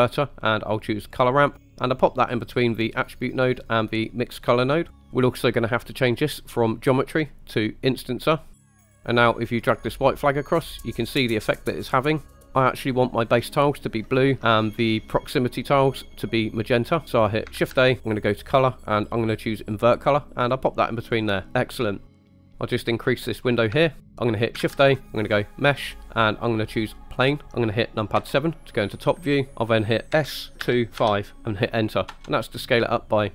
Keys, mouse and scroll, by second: 4.9 click, 7.0-8.5 drag, 9.7-12.5 drag, 17.6 shift+a, 21.1 click, 21.4 drag, 22.8 click, 22.9 click, 23.9 shift+middle drag, 24.7 shift+a, 28.2 KP_7, 28.9-29.4 scroll down 4, 29.5 Escape, 29.5 5, 30.2 s, 30.7 2, 31.0 5, 32.1 Return.